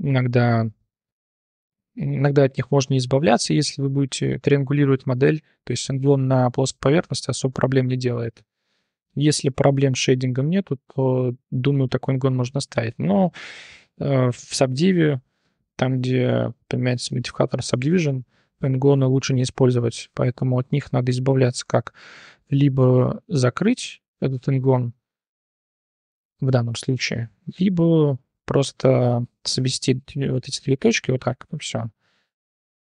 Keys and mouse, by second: 2.4-2.7 drag, 2.4 1, 3.3 3, 3.6 click, 4.4 click, 5.7 click, 6.0 1, 6.3 click, 7.5-8.8 drag, 9.4 drag, 9.7 Tab, 10.3 drag, 11.1 shift+drag, 11.4 drag, 12.5 click, 12.9 Tab, 13.3 1, 17.0-17.4 drag, 17.8 click, 18.1-18.5 drag, 18.7 1, 19.2 drag, 20.1 click, 20.9 click, 21.9 shift+click, 22.9 j, 25.4 1, 26.1 ctrl+z, 26.9 1, 27.2-28.2 drag, 28.2 g, 30.7 g.